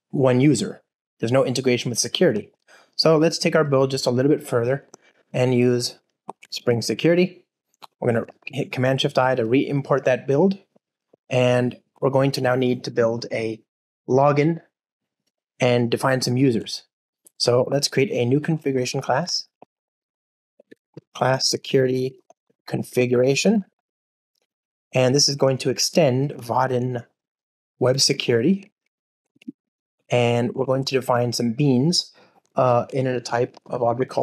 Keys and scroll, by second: 2.5 shift+super+o, 4.9 alt+shift+Left, 6.6 alt+shift+Right, 8.3 shift+super+i, 20.7 Return, 29.2 alt+shift+Left, 29.6 alt+super+l.